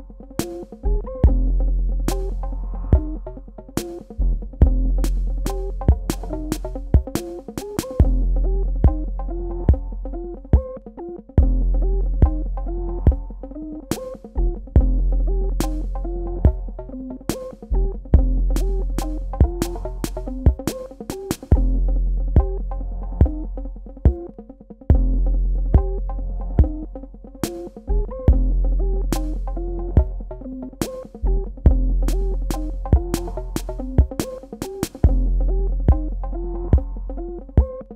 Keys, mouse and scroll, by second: 0.3 v, 0.7 click, 5.7 KP_0, 5.9 shift+Tab, 6.3 KP_0, 6.6 Tab, 7.5 KP_5, 7.7 KP_0, 8.1 Tab, 9.9 super+KP_Add, 13.6 KP_Subtract, 14.6 space, 14.7 click, 16.6 Tab, 18.2 click, 20.9 click, 23.4 super+KP_Add, 25.1 super+KP_Subtract, 31.4 click, 32.2 KP_5, 33.1 click, 33.8 KP_0, 35.1 KP_Add.